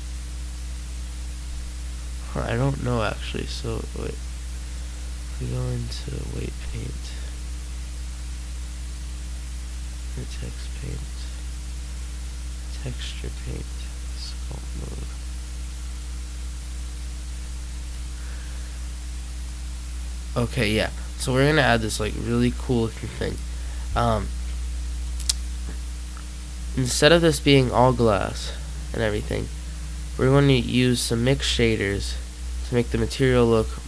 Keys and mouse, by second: 6.8 middle click, 21.8 click, 32.4-33.8 drag.